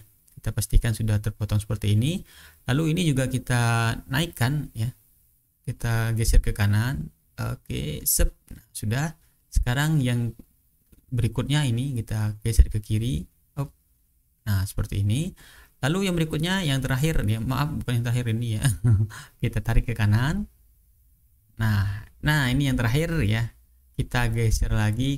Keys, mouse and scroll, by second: 1.8-2.4 ctrl+scroll up 4, 2.7-3.6 ctrl+scroll up 2, 4.3 ctrl+scroll down 1, 5.5-8.1 drag, 8.1 ctrl+scroll down 1, 9.9-11.1 ctrl+scroll up 1, 11.5-12.8 drag, 13.1-14.3 drag, 15.2-16.1 ctrl+scroll down 1, 16.1 ctrl+scroll down 1, 16.5-17.8 ctrl+scroll up 1, 18.9-21.0 drag, 21.0-22.2 ctrl+scroll down 2, 22.2-22.8 ctrl+scroll up 3, 24.5-25.1 drag.